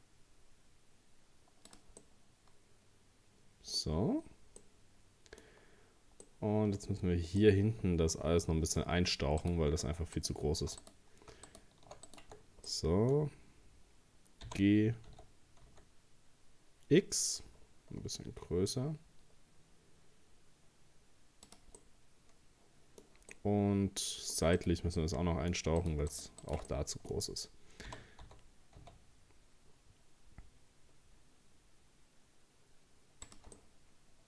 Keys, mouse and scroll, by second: 2.0-4.0 middle drag, 4.0-4.3 scroll up 1, 4.6 middle click, 5.5-6.2 scroll down 4, 6.2 middle click, 6.8-7.2 scroll up 2, 7.4-9.4 middle drag, 9.4 right click, 10.2 alt+shift+right click, 10.8 right click, 11.5 alt+shift+right click, 12.1 shift+right click, 12.4 scroll down 3, 12.7-14.5 middle drag, 14.5 g, 21.8-24.6 middle drag, 24.6 right click, 25.0 middle click, 25.8 shift+right click, 26.1 shift+right click, 26.4 shift+right click, 26.7-27.9 middle drag, 27.9 g, 33.6-34.2 middle drag.